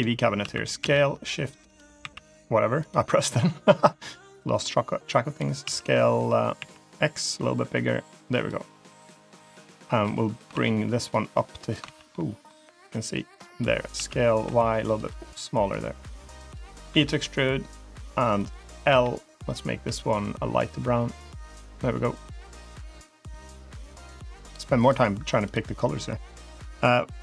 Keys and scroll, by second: 0.3 s, 1.9 s, 5.5 s, 10.4 ctrl+z, 11.7 ctrl+z, 13.8 s, 16.8 e, 18.7 l, 19.7 g.